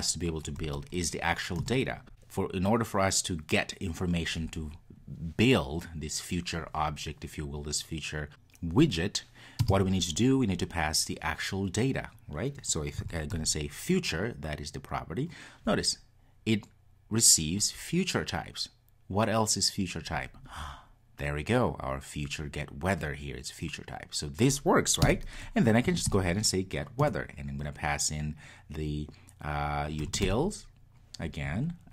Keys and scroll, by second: 25.1 Return.